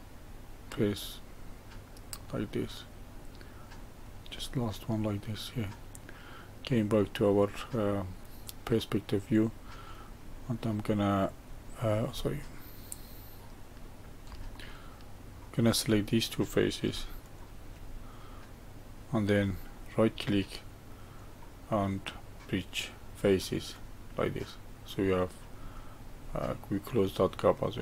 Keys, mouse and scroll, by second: 1.0 ctrl+right click, 2.1 ctrl+right click, 3.7 ctrl+right click, 5.0-8.3 middle drag, 8.3-8.7 scroll down 1, 8.7-10.2 middle drag, 10.2-10.8 scroll up 2, 10.8-11.5 middle drag, 11.5-12.1 scroll down 2, 12.1-12.9 scroll up 2, 12.9-17.2 middle drag, 17.2 shift+click, 18.3-19.9 middle drag, 19.9-23.1 right drag, 24.5-25.5 middle drag, 25.5-26.3 scroll down 1, 26.3-27.8 middle drag.